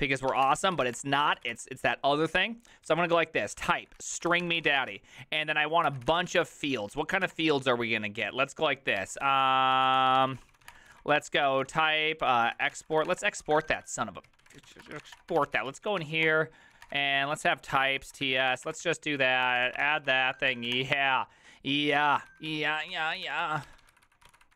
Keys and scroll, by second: 0.0-7.7 typing, 8.9-24.5 typing, 22.7 ctrl+e.